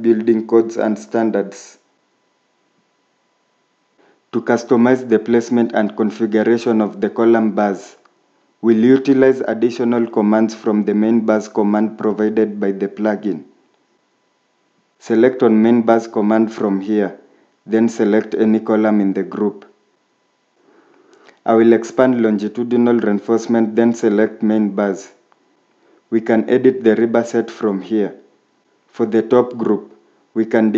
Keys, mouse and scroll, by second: 0.1 scroll, 0.4 shift+middle click, 8.1 scroll up 1, 10.5 scroll down 1.